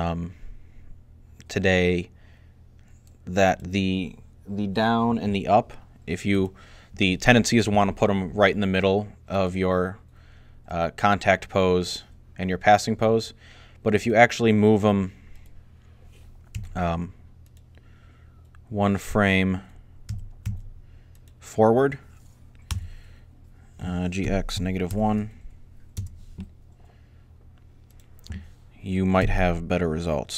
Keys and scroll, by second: 16.4 a, 19.9-20.3 typing, 22.5 g, 23.8-25.3 typing, 29.0 s.